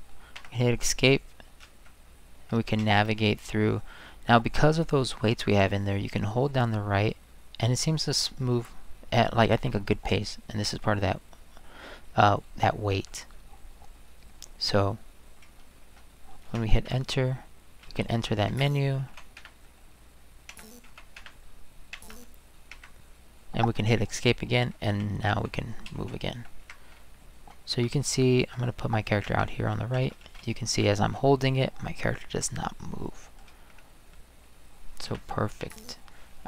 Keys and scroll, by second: 0.4 Escape, 1.6 Right, 2.3 Right, 3.1 Right, 5.9-12.9 Right, 15.4 Right, 15.8 Right, 16.8 Return, 18.5 Escape, 19.1 Left, 19.4 Return, 20.5 Escape, 20.9 Left, 21.2 Return, 21.9 Escape, 22.7 Escape, 24.7 Right, 25.0 Up, 25.3 Left, 25.6 Down, 25.9 Right, 26.6 Escape, 26.9 Right, 27.4 Right, 27.7 Escape, 28.0 Right, 29.2 Escape, 29.9 Right, 30.2 Right, 30.5-33.4 Right, 35.1 Return, 35.6 Escape.